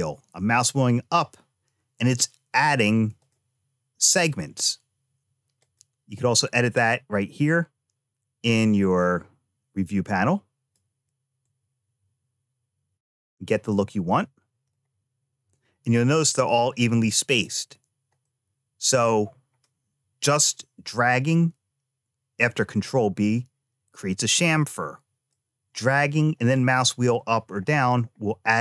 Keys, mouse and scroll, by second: 5.4 click, 7.3-10.6 drag, 11.3-14.6 drag, 17.3 click, 18.1 middle click, 24.4 middle click.